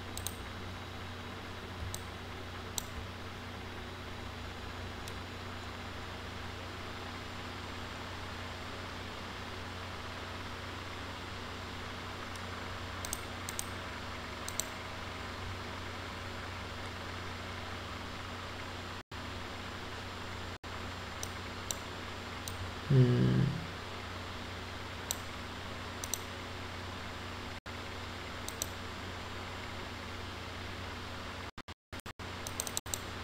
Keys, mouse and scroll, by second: 0.1 click, 1.9-2.7 alt+drag, 13.5 click, 14.5 click, 21.2 click, 22.5-25.2 drag, 26.0 click, 28.5 click, 31.9 click, 32.5 click.